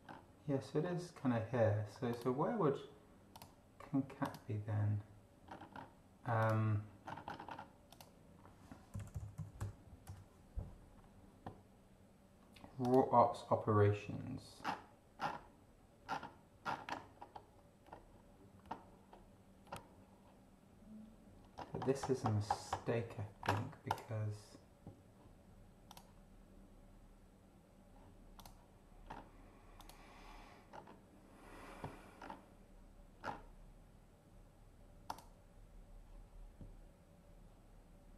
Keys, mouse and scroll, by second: 0.8 scroll up 2, 2.1 click, 3.3 click, 4.2 click, 5.4-5.9 scroll up 2, 6.4 click, 7.0-7.6 scroll up 2, 7.8 click, 8.6-10.1 typing, 12.8 click, 14.6-15.4 scroll down 4, 16.0-16.9 scroll down 4, 17.1-17.5 scroll down 2, 17.8-18.3 scroll down 2, 18.6-19.3 scroll down 2, 19.7-20.5 scroll down 2, 21.5-22.2 scroll up 2, 22.2-22.9 scroll up 1, 22.9-23.4 scroll up 1, 23.9 click, 25.9 click, 28.4 click, 29.1 scroll up 1, 29.8 click, 30.7 scroll down 2, 32.2 scroll down 2, 33.2-33.6 scroll down 2, 35.0 click.